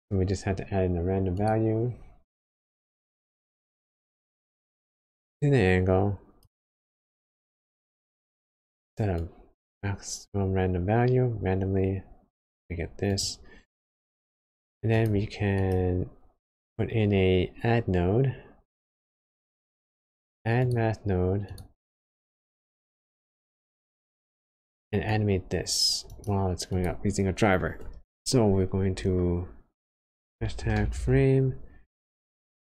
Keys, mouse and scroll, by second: 5.2 click, 7.0-7.8 scroll up 8, 7.8 middle click, 8.4 scroll up 1, 13.7 click, 23.3 click.